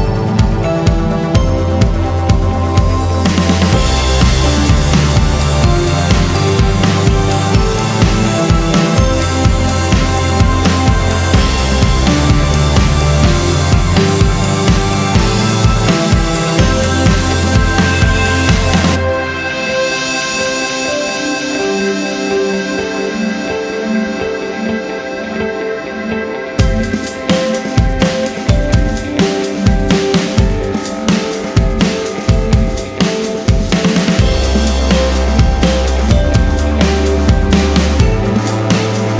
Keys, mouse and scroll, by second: 2.8 click, 4.8 click, 12.5 click, 18.0 click, 19.7 click, 25.6 click, 25.8 double click, 26.4 click, 27.7 alt+click, 31.0 click, 32.5 scroll up 1, 32.9 scroll down 1, 33.2 click, 35.0 alt+click, 37.3 alt+click, 38.0 ctrl+alt+click, 38.9 ctrl+r.